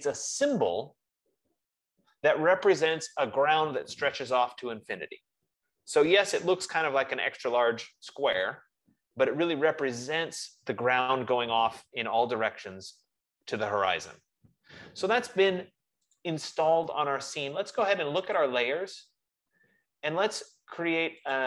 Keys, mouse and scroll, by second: 16.6-18.1 drag, 19.4 click.